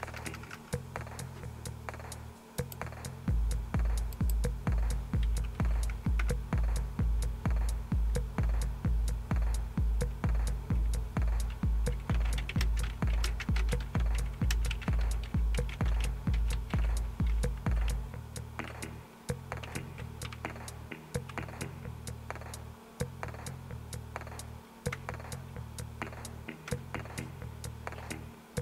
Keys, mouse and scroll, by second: 0.0-1.0 typing, 2.6 right click, 4.1 click, 5.5-6.7 typing, 11.9-20.8 typing, 17.8 Return, 24.9 Return, 26.7 Return.